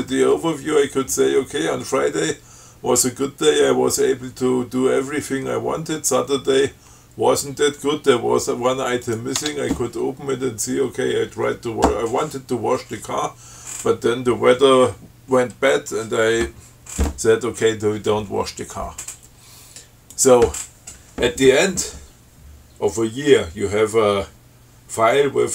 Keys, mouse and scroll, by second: 9.3 click, 9.6 Tab, 20.4 click.